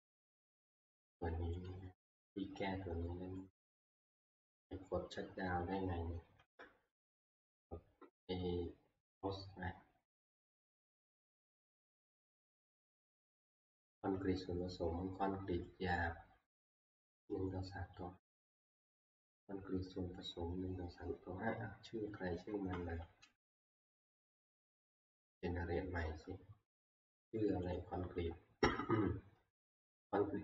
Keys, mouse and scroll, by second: 0.8 middle click, 1.7 click, 3.4 middle click, 4.7 alt+F2, 6.4 alt+Tab, 8.7 scroll up 2, 10.0 scroll down 1, 10.4 middle click, 10.4 middle click, 10.5 scroll, 11.6 click, 11.8 click, 22.5 Escape, 23.3 alt+Tab, 25.3-25.9 scroll, 27.8 click.